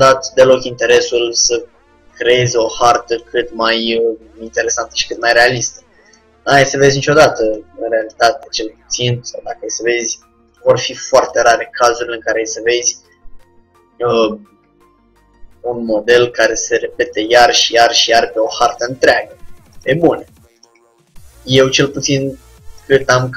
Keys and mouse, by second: 3.2-4.9 drag, 3.4 g, 5.3-7.0 drag, 5.4 g, 7.6-9.9 drag, 11.3-13.0 drag, 11.7 g, 14.2-15.9 drag, 14.7 g, 17.9-19.7 drag, 18.1 g, 20.7-22.3 drag, 20.9 g, 22.9-23.3 drag, 23.2 g.